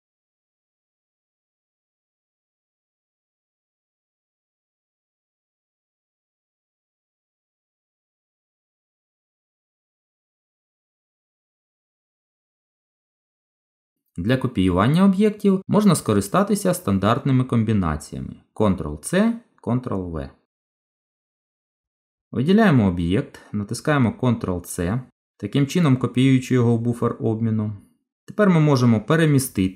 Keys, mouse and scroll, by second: 2.6 Tab, 3.8 Delete, 4.5 middle click, 7.2 shift+a, 9.9 middle click, 16.5 click, 25.7 ctrl+c, 28.2 g.